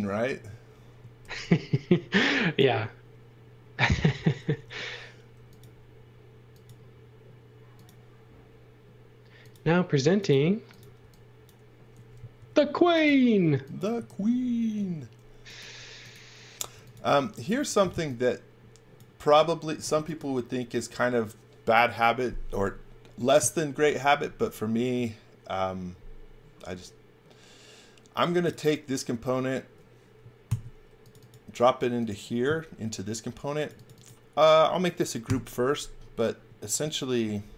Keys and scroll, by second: 1.2 shift+3, 4.5 l, 11.0 e, 12.3 l, 13.9 space, 16.5-18.4 typing, 19.8 space, 30.4 super+x, 35.2 g.